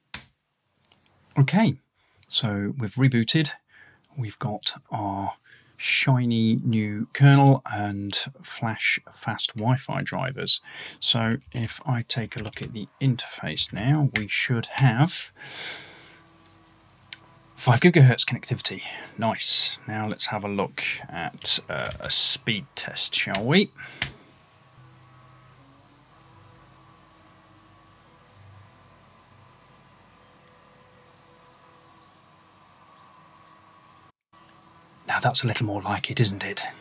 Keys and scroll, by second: 0.0-1.0 typing, 1.0 Tab, 1.0 Return, 3.3 typing, 4.4-4.8 typing, 11.1-15.3 typing.